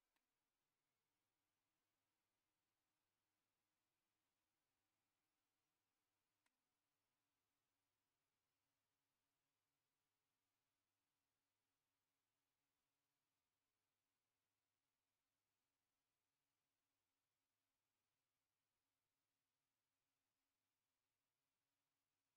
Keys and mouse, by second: 0.1-6.4 middle drag.